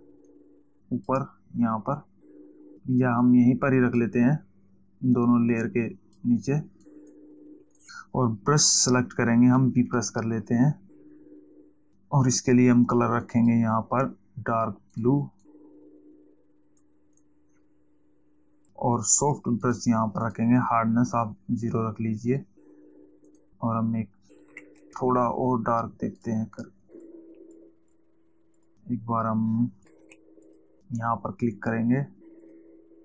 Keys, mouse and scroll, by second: 0.6 click, 3.7 click, 6.1 click, 7.2 click, 8.1 click, 10.4 b, 13.7 click, 15.5 click, 20.1 click, 22.8 click, 23.6 click, 25.1 ctrl+alt+z, 26.7 click, 27.3 click, 28.9 click, 30.4 z, 30.7 click, 32.7 click.